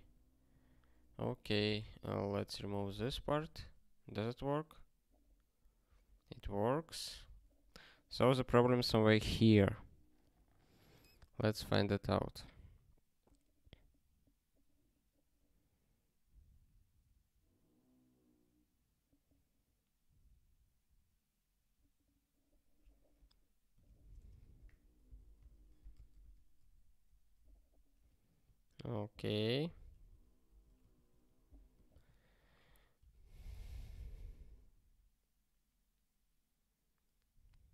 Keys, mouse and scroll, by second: 2.9 super+o, 3.9 ctrl+k, 25.8 super+o, 26.3 ctrl+k, 28.0 q, 28.7 ctrl+/, 30.5 ctrl+g, 30.9 ctrl+/.